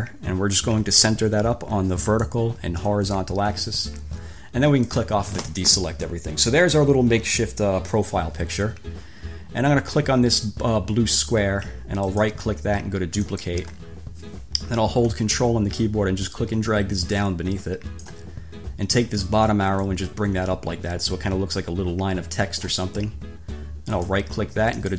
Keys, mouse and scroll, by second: 2.4 click, 3.1 click, 5.0 click, 11.4 click, 12.4 right click, 13.4 click, 16.0-18.4 ctrl+drag, 20.0-23.0 drag, 24.1 click.